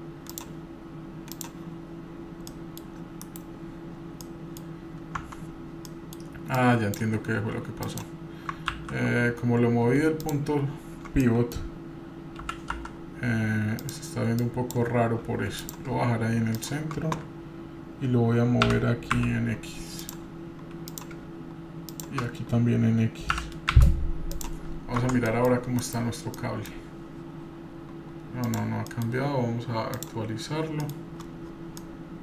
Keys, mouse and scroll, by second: 0.3 click, 1.3 drag, 1.9-2.3 scroll up 3, 2.2 click, 2.5-2.8 middle drag, 3.3 KP_Divide, 3.9 scroll down 2, 4.2-4.6 middle drag, 5.2 Tab, 5.6 scroll down 2, 5.9 middle click, 6.2 scroll up 1, 6.6 click, 7.9 click, 8.7 ctrl+z, 10.2 shift+click, 11.2 middle click, 12.4 g, 14.4 click, 15.6 click, 16.6 shift+click, 18.6 g, 20.9 click, 23.3 g, 24.6-25.2 scroll down 2, 25.2 Tab, 25.2 middle click, 26.3 KP_Divide, 26.3 scroll down 1, 26.3 middle click, 26.9 scroll up 2, 28.5 click, 28.5 scroll up 4, 28.9 middle click, 29.9 click, 30.8-31.2 middle drag, 30.9-31.8 scroll down 5, 31.8-32.2 middle drag.